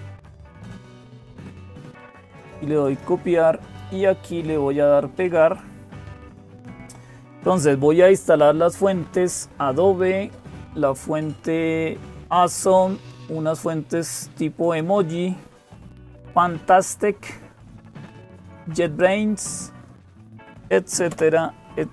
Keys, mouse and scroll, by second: 0.0-21.9 typing, 2.6-4.3 drag, 5.2-7.1 drag, 14.4-15.4 drag, 19.2 click, 20.9 Return.